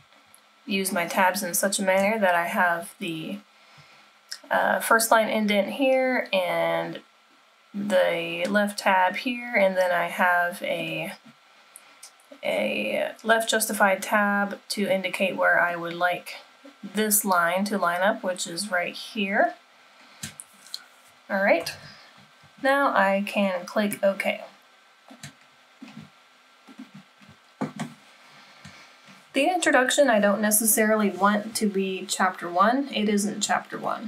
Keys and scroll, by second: 21.9 super+-.